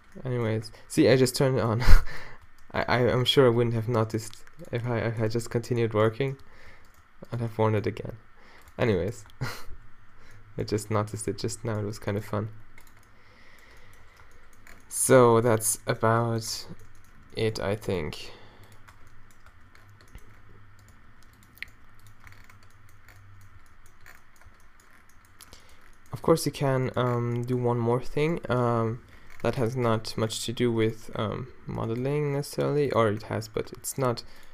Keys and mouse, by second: 0.0 Tab, 0.0 o, 0.5 Tab, 1.9 Tab, 2.4 Tab, 2.8 click, 3.5 g, 6.0 z, 6.4 Tab, 6.7 Tab, 7.9 g, 8.7 Tab, 9.3 Tab, 9.7 z, 11.4 b, 11.9 z, 12.3 g, 14.2 Tab, 14.2 b, 14.2 z, 15.3 a, 16.6 Tab, 18.1 g, 18.9 Tab, 19.5 Tab, 20.9 g, 21.7 g, 22.3 Tab, 23.6 a, 24.5 a, 26.5 Tab, 28.2 middle click, 28.8 -, 30.1-31.3 middle drag, 31.3-31.7 q, 32.0 g, 33.3 Tab, 33.3 q, 33.7 Tab, 34.1 g.